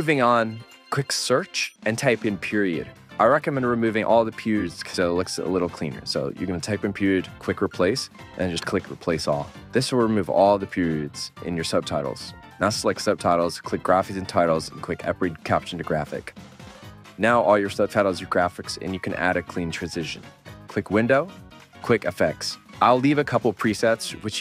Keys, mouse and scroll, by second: 0.5 right click, 10.2 s, 16.6 s, 22.7 s.